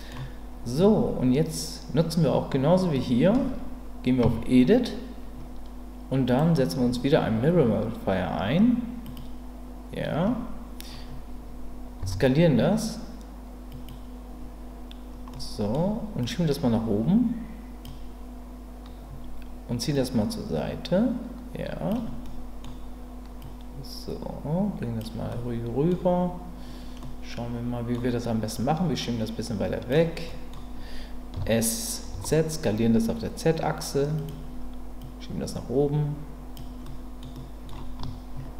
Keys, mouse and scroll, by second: 4.2 Tab, 6.2-9.2 drag, 12.0 s, 13.7 click, 15.3 middle click, 16.2-17.8 drag, 20.0-21.9 drag, 22.2 middle click, 23.4-25.0 drag, 25.3 middle click, 27.0 middle click, 28.6-29.9 drag, 30.3 middle click, 31.3 s, 32.1 z, 34.2 click, 35.0-36.5 drag, 36.8 middle click, 37.3 middle click.